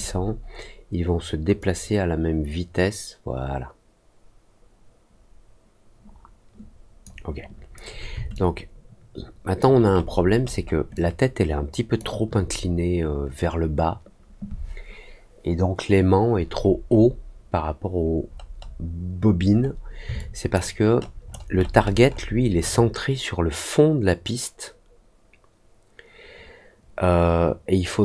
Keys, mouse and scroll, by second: 1.5-7.0 drag, 8.3-9.5 alt+drag, 9.8 alt+middle click, 10.3 alt+middle click, 10.9-11.9 alt+drag, 16.5-17.0 scroll up 2, 18.2-19.8 scroll down 4, 20.1 alt+click, 20.8 alt+middle click, 21.2 alt+middle click, 21.5 alt+middle click, 21.7 alt+middle click, 22.0 alt+middle click.